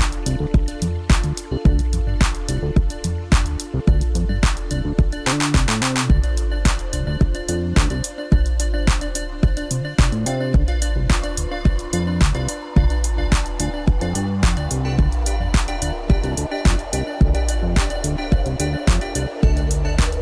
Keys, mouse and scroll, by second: 0.0 ctrl+KP_Add, 0.4 drag, 0.6 click, 0.8 scroll down 2, 0.9 middle click, 1.2 click, 1.4 scroll up 1, 1.5 scroll down 2, 1.5 middle click, 1.9 scroll up 1, 2.2 click, 2.6 click, 3.4 scroll up 2, 3.7 Tab, 4.0 scroll down 2, 4.1 middle drag, 4.3 click, 4.4 scroll up 1, 4.8 click, 5.1 click, 6.1-6.4 scroll up 1, 6.5-7.3 drag, 7.7-8.5 drag, 9.4-10.4 drag, 10.7 Tab, 10.9 scroll up 1, 11.3 click, 11.8 click, 12.5 Tab, 12.6 scroll down 2, 12.9 click, 13.6 shift+drag, 13.8 shift+drag, 14.1 shift+drag, 14.3 shift+click, 15.1 ctrl+l, 15.9 scroll down 3, 16.1 scroll up 2, 16.3-16.7 middle drag, 16.7 click, 17.1 ctrl+KP_2, 17.2 ctrl+KP_2, 17.3 ctrl+KP_2, 17.6 scroll up 2, 17.9 click, 18.9 click, 19.2 click, 19.6 click.